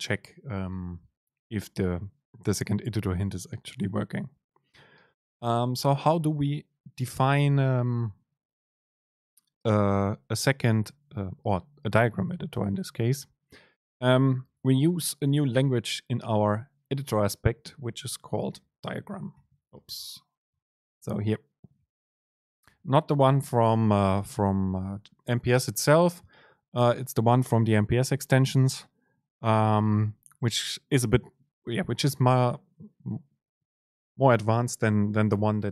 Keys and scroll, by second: 15.7 super+l.